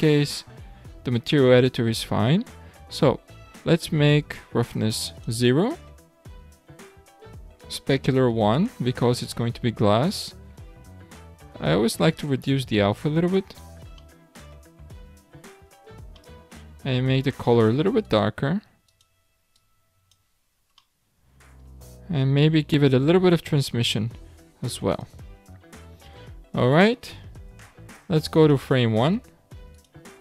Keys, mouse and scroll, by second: 0.0 click, 0.9-4.1 scroll down 6, 4.6-10.6 drag, 11.2-12.8 drag, 12.8-14.0 scroll up 5, 14.0-14.9 middle drag, 14.9 scroll down 1, 15.1-16.2 scroll up 4, 16.2 shift+middle click, 17.1 click, 20.5-20.9 scroll down 3, 20.9-22.0 middle drag, 22.0-23.6 scroll down 8, 23.6-25.5 drag, 25.5 scroll up 3, 26.6-27.1 scroll up 1, 27.1-28.2 scroll up 13, 28.4 click, 29.1-29.4 scroll down 3, 29.7 click.